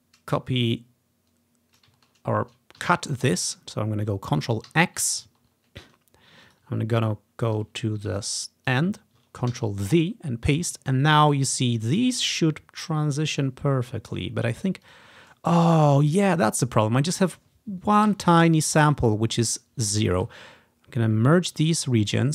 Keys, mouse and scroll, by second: 1.9 ctrl+click, 2.2-3.9 ctrl+scroll down 1, 4.8 ctrl+x, 5.5 ctrl+scroll down 1, 6.6 click, 6.9-7.9 ctrl+scroll up 1, 8.3 click, 9.6 ctrl+v, 15.0 click, 16.5 click, 18.2 Delete, 19.0 click, 20.3 ctrl+z, 21.6 click.